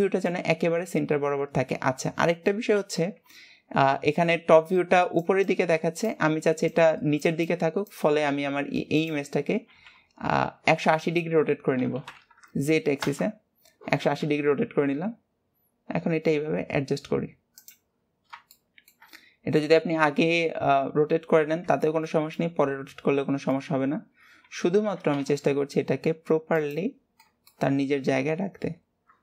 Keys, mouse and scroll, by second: 0.1-1.1 shift+middle drag, 1.1 scroll down 2, 18.3-18.7 scroll up 2, 18.7 shift+middle click, 19.5 scroll up 1, 20.8-21.6 scroll up 1, 21.6-22.0 scroll down 1, 22.0-24.0 shift+middle drag, 24.0-24.3 scroll up 3, 27.2 scroll down 5, 27.6-28.9 shift+middle drag, 28.9 scroll up 2.